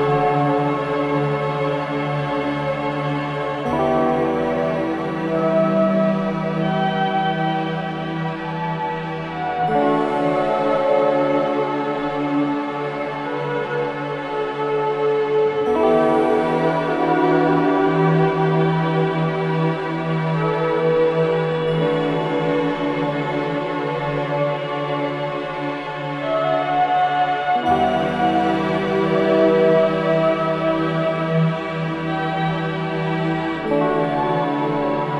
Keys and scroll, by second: 2.9 4, 6.0 3, 6.7 [, 7.1 ].